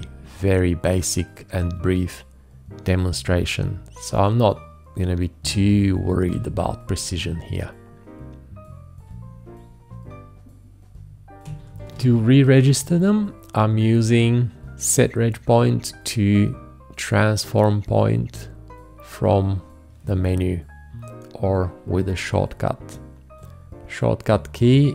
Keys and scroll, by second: 6.3 ctrl+t, 11.9 ctrl+t.